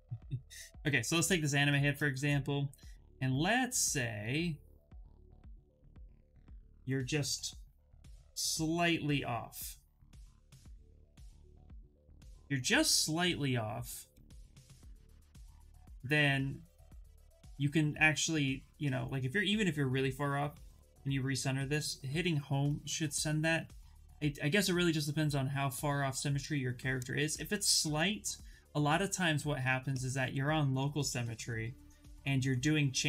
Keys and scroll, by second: 4.6 w, 7.0 x.